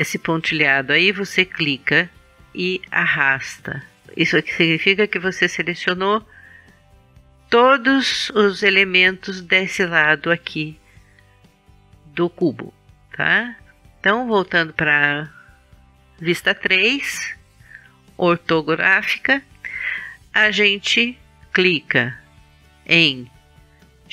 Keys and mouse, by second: 3.9-5.7 middle drag, 14.4 KP_3.